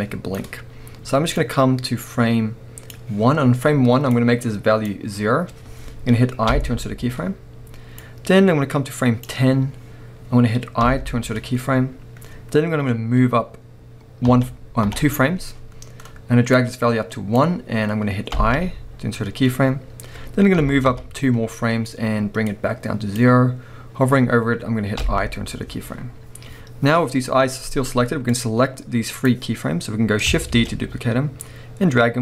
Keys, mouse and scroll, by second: 0.6 scroll down 1, 9.6-10.8 scroll up 1, 14.3 Right, 16.5 click, 20.6 Right, 22.5 click, 28.3 click, 30.5 shift+d.